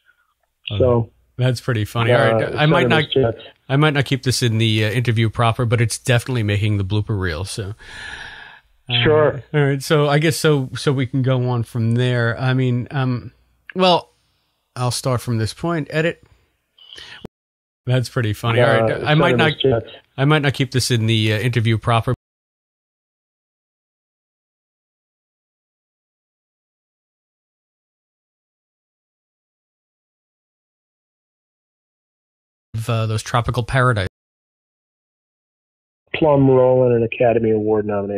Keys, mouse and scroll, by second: 16.7-22.2 drag, 17.2 space, 17.7 space, 22.0 space, 22.9 Delete, 23.4 click, 23.9 click, 25.4 s, 26.3-38.1 drag, 32.6 space, 34.0 space, 36.0 space.